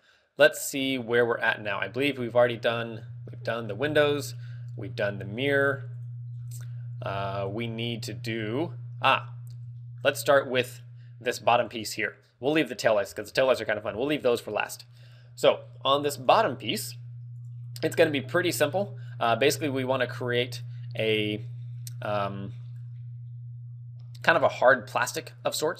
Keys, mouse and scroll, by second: 0.2 scroll down 3, 0.8 middle click, 2.5 right click, 3.4 shift+middle click, 3.9 scroll up 5, 4.4 middle click, 6.8 right click, 6.8-7.4 scroll down 4, 7.7 shift+middle click, 8.5 middle click, 9.5 scroll up 1, 9.8 shift+middle click, 10.7 scroll down 1, 12.7 right click, 19.1 click, 19.4-19.8 scroll down 7, 21.0 scroll up 1, 22.2 scroll up 2, 22.2 middle click, 23.2 scroll up 1, 24.5 click, 25.5 click.